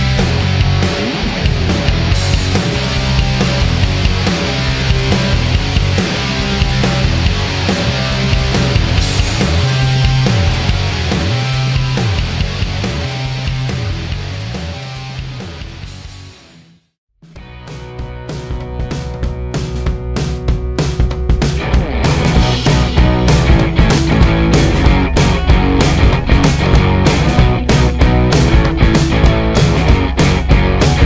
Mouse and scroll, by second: 2.7-3.7 drag, 4.7 click, 5.7 click, 7.1 click, 7.5 click, 8.3 click, 9.2 click, 13.3 click, 15.2 click, 16.7-21.2 drag, 21.5 click, 27.1-28.7 drag, 29.1 click, 30.5 click.